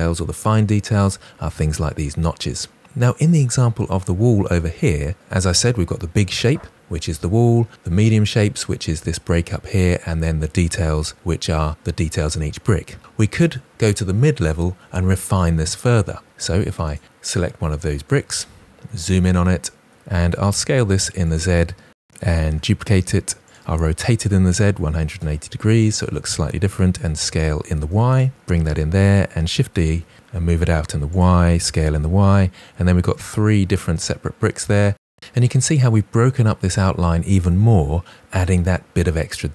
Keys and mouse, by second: 18.2 KP_Decimal, 20.0 s, 20.2 z, 20.7 click, 21.9 g, 22.9-24.6 typing, 23.4 click, 24.8 Return, 26.1-30.0 typing, 28.5 click, 31.0-31.3 drag, 31.5 s, 31.8 y, 33.0-33.3 drag, 33.7-34.7 typing, 34.2 click.